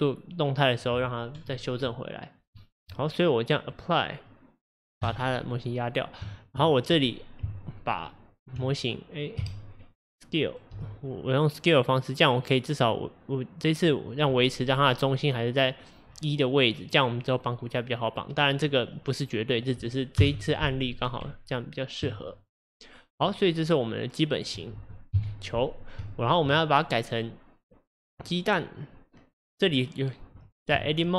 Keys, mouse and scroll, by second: 1.5-3.1 scroll down 4, 3.7-6.4 drag, 6.4-7.5 shift+middle drag, 7.5 Tab, 9.4 a, 10.8 s, 14.7-15.1 scroll up 4, 16.1-17.8 scroll down 6, 18.7-20.2 middle drag, 20.2 KP_1, 21.3 Tab, 22.4 drag, 23.4-24.6 middle drag, 24.6 click, 25.2 KP_1, 26.1-29.2 shift+middle drag, 30.8 Tab.